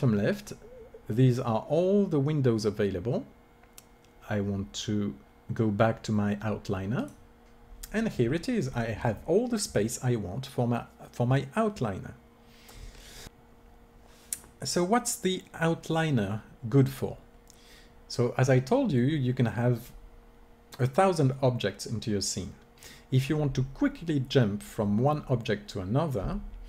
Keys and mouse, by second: 13.3-22.0 drag.